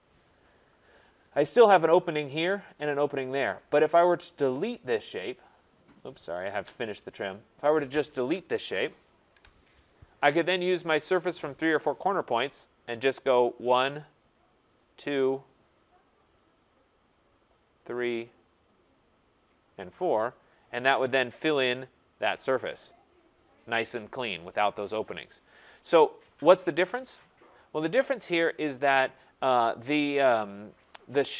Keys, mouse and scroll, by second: 0.0 scroll, 0.9-1.9 scroll, 4.6 click, 5.5 click, 6.5 Return, 7.3 click, 9.3 Delete, 11.9 click, 13.4 click, 14.9 click, 15.2-15.5 scroll down 5, 16.0 scroll up 5, 17.6 click, 18.0 scroll down 1, 18.0 scroll, 19.5 click, 20.2-21.3 scroll, 21.3 scroll, 22.6 click, 25.1-25.7 scroll, 26.0-26.5 scroll, 28.9 click.